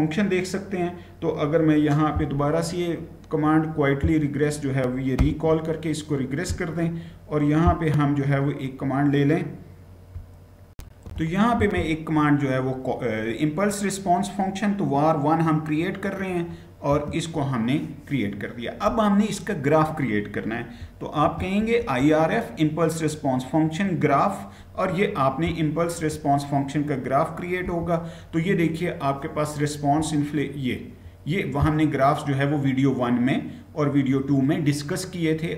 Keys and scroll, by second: 5.0 Return, 10.6 ctrl+c, 10.6 shift+F9, 16.7 Return, 21.0 ctrl+v, 27.4 Return.